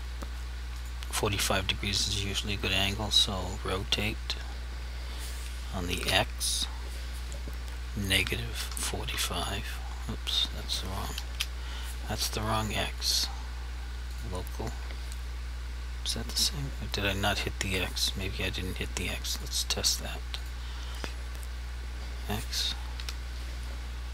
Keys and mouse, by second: 2.2 r, 6.0 x, 8.2-9.0 typing, 11.3 Escape, 13.0 click, 19.4 click, 21.3 r, 23.0 x.